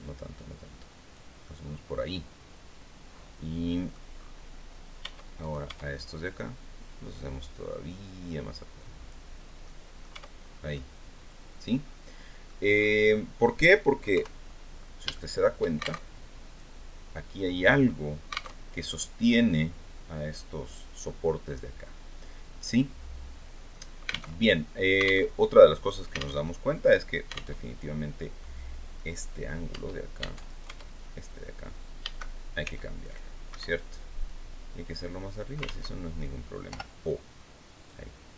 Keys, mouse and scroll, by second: 0.9-3.6 drag, 3.6-3.9 scroll up 1, 4.5 Tab, 4.9 right click, 5.2 Tab, 6.6-8.8 right drag, 8.9 scroll down 1, 9.1 click, 9.6 Tab, 9.9-10.2 scroll down 1, 10.2-12.1 drag, 12.2-12.6 scroll up 1, 12.6 click, 13.6 KP_3, 14.2 scroll down 1, 14.6 shift+click, 15.5 alt+shift+Tab, 18.0 alt+Tab, 23.8 alt+Tab, 24.8 alt+Tab, 25.9 alt+Tab, 27.0 alt+Tab, 28.4 right click, 29.2 Tab, 29.9 right click, 31.5 a, 32.1 c, 32.5 click, 33.0 Escape, 33.7-35.2 drag, 35.2 ctrl+z, 36.1 o, 37.3-38.3 drag.